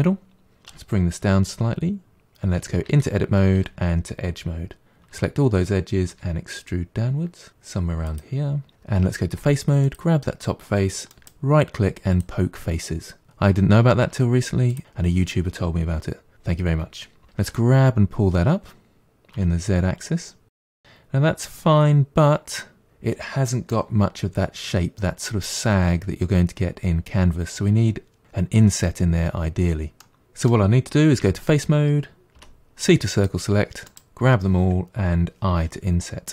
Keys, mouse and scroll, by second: 0.7 g, 2.2 ctrl+z, 2.9 Tab, 3.6 2, 5.2 a, 6.2 e, 9.4 3, 9.9 click, 11.1-13.2 right drag, 14.1 1, 14.7 click, 17.4 g, 20.4-22.8 middle drag, 30.0-31.2 middle drag, 31.2 3, 32.4 c, 35.6 i.